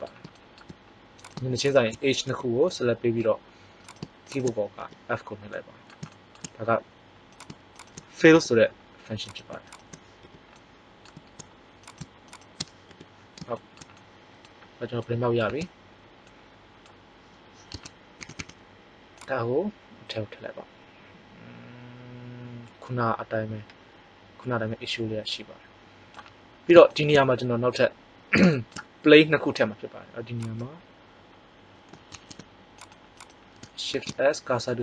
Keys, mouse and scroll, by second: 0.4 middle click, 1.1 right click, 2.3 f, 4.8 f, 7.3 right click, 8.3 f, 10.3 f, 12.9 f, 15.4 Tab, 17.7 Tab, 18.1 a, 18.3 a, 19.1 click, 30.4 right click, 32.0 ctrl+Tab, 33.9 shift+s.